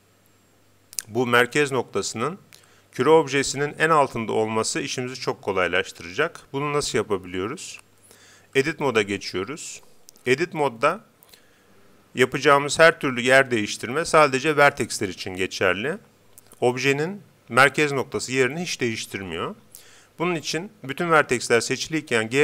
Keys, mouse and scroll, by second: 8.6 Tab, 22.2 g.